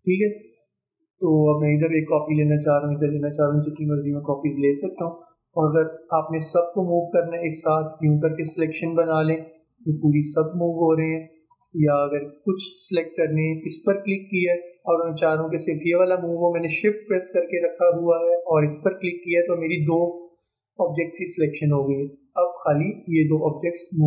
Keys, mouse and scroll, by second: 1.5-3.3 drag, 3.3 click, 4.2-11.5 drag, 18.8 shift+click, 22.3-24.0 drag.